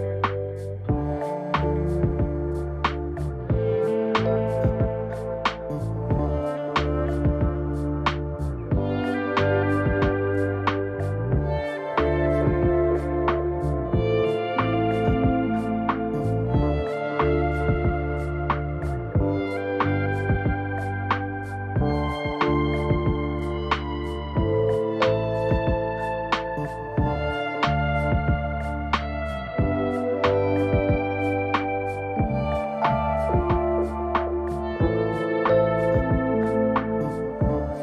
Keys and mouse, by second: 6.0 ctrl+z, 7.9 ctrl+r, 16.0 ctrl+z, 17.0 ctrl+r, 29.0 ctrl+r, 35.9 ctrl+r.